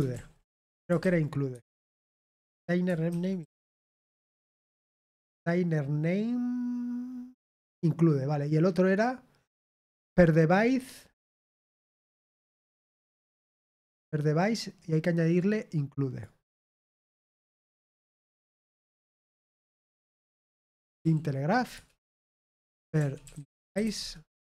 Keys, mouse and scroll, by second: 1.4-2.1 typing, 15.3-16.5 drag, 18.7-20.1 drag, 20.2 click, 22.1-24.3 typing.